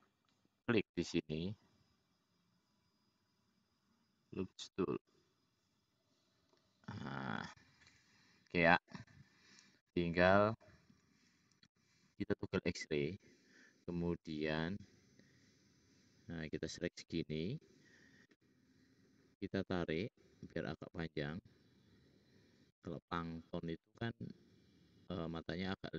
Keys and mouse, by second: 1.4 click, 2.5 click, 2.9 click, 6.4-7.3 middle drag, 7.9 `, 11.7-13.7 drag, 11.7-13.7 middle drag, 11.7-13.7 right drag, 16.6 click, 24.5 click, 24.5 middle click, 24.5 right click.